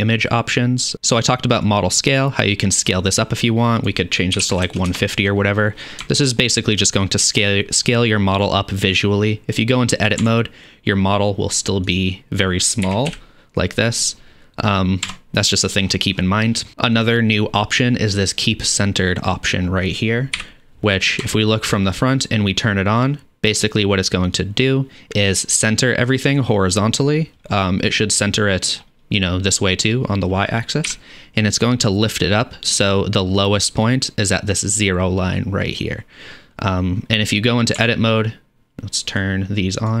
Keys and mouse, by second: 10.1-11.9 middle drag, 10.5 Tab, 11.9 click, 12.8 middle click, 12.9 a, 13.1 KP_Decimal, 15.3 Tab, 16.1 middle click, 16.3 middle click, 16.5 middle click, 19.5-23.9 middle drag, 20.4 KP_1, 23.9-39.4 drag, 30.9 KP_1, 37.9 Tab, 39.4-40.0 middle drag.